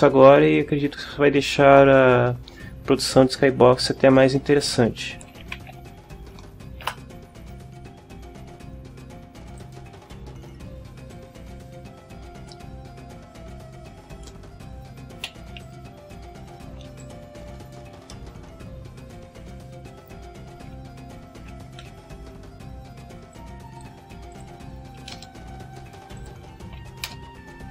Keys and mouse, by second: 5.0-6.2 typing, 6.8 Return, 9.4 click, 11.1-12.6 drag, 13.3-14.4 drag, 14.7 right click, 15.2 Delete, 15.6 click, 16.4 right click, 16.7 Delete, 17.0 click, 18.1 middle click, 19.6 right click, 20.6 KP_7, 21.8 n, 23.3 click, 24.3 click, 25.0 KP_0, 25.1 KP_Enter, 26.2 click, 26.4 KP_0, 27.0 KP_Enter.